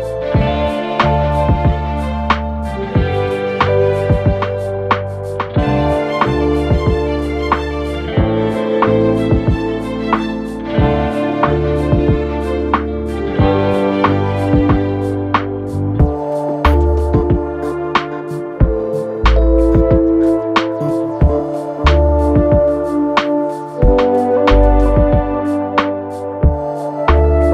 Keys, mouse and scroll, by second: 6.1 right click, 7.1 click, 13.7 ctrl+z, 15.5-27.5 drag.